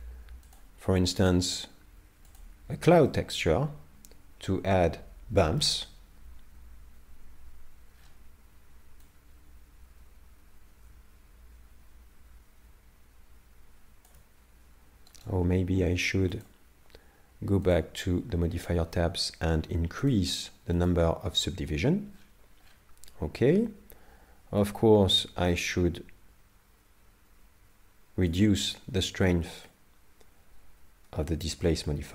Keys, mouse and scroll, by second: 3.1 middle click, 7.9 scroll down 1, 9.1 click, 9.1 scroll down 7, 15.1 right click, 16.4 click, 18.5 scroll up 6, 20.1 click, 22.1 scroll down 1, 24.6 shift+click, 24.6 scroll down 14, 29.7 shift+click.